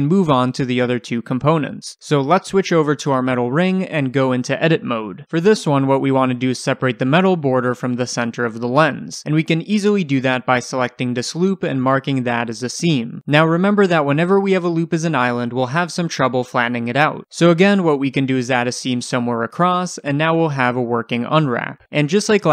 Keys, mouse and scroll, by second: 0.5-1.5 middle drag, 1.5 click, 2.6 h, 2.9 click, 3.1 h, 4.2 click, 4.6 Tab, 5.1-6.2 scroll up 1, 6.8-10.7 shift+middle drag, 7.3-7.8 scroll up 2, 10.7 alt+click, 11.5-14.1 right drag, 14.1-17.8 middle drag, 14.8-15.3 scroll up 2, 17.8 click, 17.9 middle click, 18.6 ctrl+click, 19.6-22.4 right drag, 20.1 3, 20.6 l, 22.4 click.